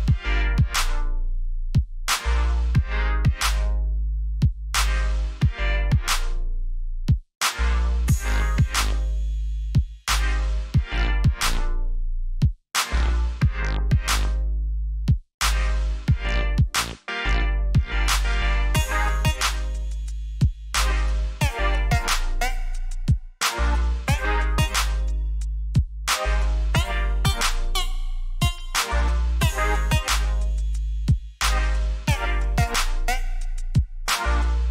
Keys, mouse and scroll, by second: 0.1 ctrl+z, 1.7 click, 5.3 ctrl+j, 5.6-6.3 typing, 6.4 click, 8.4 ctrl+z, 11.4 z, 12.0 ctrl+alt+shift+e, 14.7 ctrl+Num_Lock, 14.9 ctrl+j, 15.4 click, 18.8-19.4 alt+scroll up 2, 19.9 alt+scroll down 3, 20.8 t, 21.5 right click, 23.1 click, 26.8 scroll down 1, 27.4-27.8 alt+scroll down 2, 28.6 click, 31.3-31.8 scroll up 2, 32.2-33.0 scroll down 3, 34.4 click.